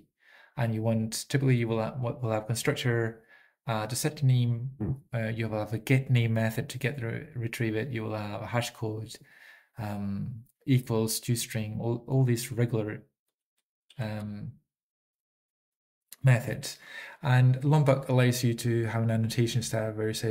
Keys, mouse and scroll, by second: 2.4 Up, 2.4 ctrl+p, 2.4 ctrl+n, 2.4 ctrl+e, 2.4 ctrl+a, 2.4 alt+<, 2.4 alt+>, 2.4 ctrl+g, 2.4 ctrl+s, 2.4 click, 4.4 Up, 4.4 ctrl+p, 4.4 ctrl+n, 4.4 ctrl+e, 4.4 ctrl+a, 4.4 alt+<, 4.4 alt+>, 4.4 ctrl+g, 4.4 ctrl+s, 4.4 Return, 4.4 click, 4.4-5.1 typing, 5.1 Up, 5.1 ctrl+p, 5.1 ctrl+n, 5.1 ctrl+e, 5.1 ctrl+a, 5.1 alt+<, 5.1 alt+>, 5.1 ctrl+g, 5.1 ctrl+s, 5.1 click, 8.4 Up, 8.4 ctrl+p, 8.4 ctrl+n, 8.4 ctrl+e, 8.4 ctrl+a, 8.4 alt+<, 8.4 alt+>, 8.4 ctrl+g, 8.4 ctrl+s, 8.4 click, 8.4 typing, 13.6 ctrl+e, 13.6 ctrl+a, 13.6 ctrl+p, 13.9 ctrl+p.